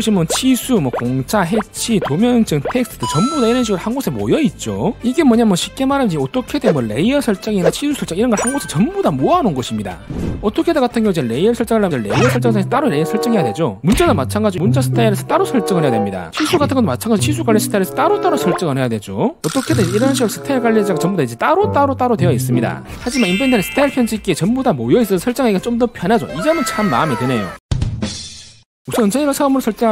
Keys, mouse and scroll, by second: 12.5 click, 14.0 s, 14.4 t, 14.7 right click, 17.4-18.4 typing, 18.1 right click.